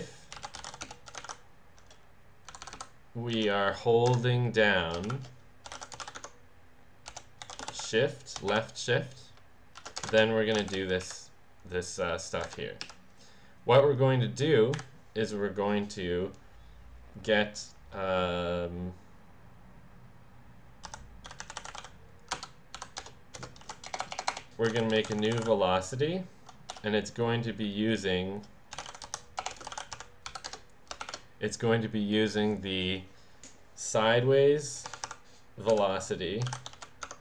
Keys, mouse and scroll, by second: 0.0-1.8 typing, 2.5 Down, 2.8 Down, 3.4 Up, 4.1 Return, 5.1-8.5 typing, 10.1 Return, 11.1 Up, 12.5 Return, 12.9 Up, 14.7 Delete, 20.6-22.3 typing, 22.8 Down, 23.0 Return, 23.4-26.7 typing, 28.5-31.1 typing, 30.5 Return, 34.9-37.2 typing.